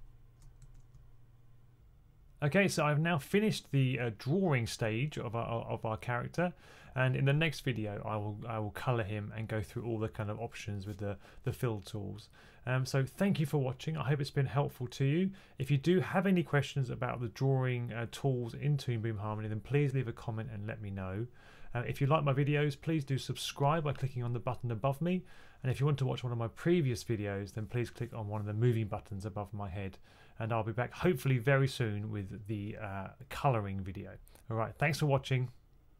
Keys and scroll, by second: 0.0-0.5 typing.